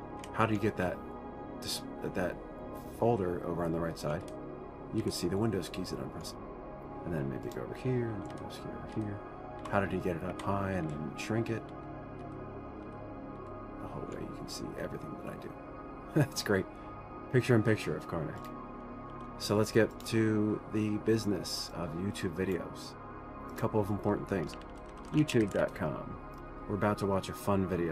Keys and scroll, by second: 0.1-0.8 typing, 4.6 super+Right, 5.4 super+Right, 9.3 super+Left, 9.3 super+Right, 10.1 super+Up, 10.7 super+Up, 11.3 super+Left, 12.1 super+Up, 12.6 super+Right, 13.3 super+Left, 13.8 super+Up, 19.5 ctrl+w, 24.7-26.4 typing.